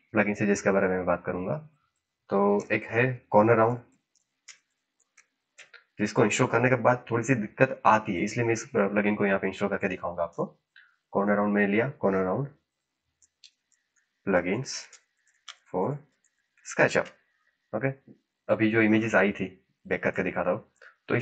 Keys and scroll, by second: 2.5-6.0 typing, 10.2 Return, 12.8-17.2 typing.